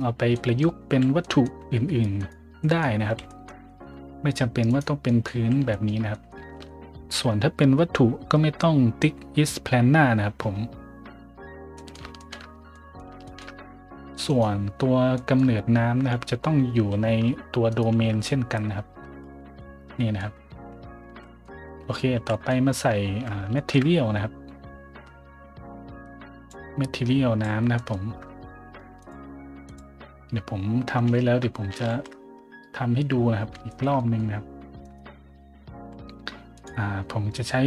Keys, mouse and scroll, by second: 0.3 middle drag, 0.9 a, 1.2 middle drag, 2.2 right click, 2.6 middle drag, 3.0 a, 3.3 middle drag, 3.7 shift+middle drag, 4.1 middle click, 4.7 right click, 5.0 middle drag, 5.3 a, 5.7 shift+middle drag, 6.1 middle drag, 6.5 shift+middle drag, 11.8 middle drag, 12.2 shift+middle drag, 12.5 middle click, 12.7 middle drag, 13.3 shift+middle drag, 13.5-14.0 middle drag, 14.2 right click, 14.8 scroll down 2, 15.1 middle drag, 15.7 scroll up 1, 16.7 scroll up 1, 17.7 right click, 17.9 Tab, 19.3 z, 19.6-20.1 middle drag, 21.0 z, 21.2 middle drag, 21.5 Tab, 22.2 a, 22.3 middle drag, 22.6 middle drag, 23.5 shift+middle drag, 26.5 click, 27.7 middle drag, 29.0 click, 29.6 click, 31.0 n, 31.8 shift+z, 33.7 shift+middle click, 34.0 middle drag, 34.8 right click, 35.7 a, 36.5 click, 37.5-37.6 scroll down 3.